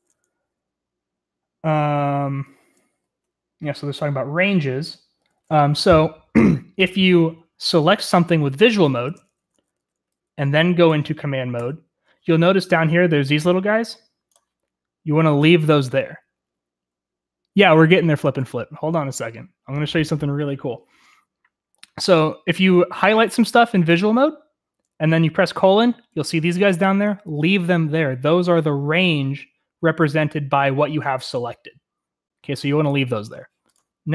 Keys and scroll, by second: 4.5 j, 6.4 j, 7.9-10.1 typing, 11.4 typing.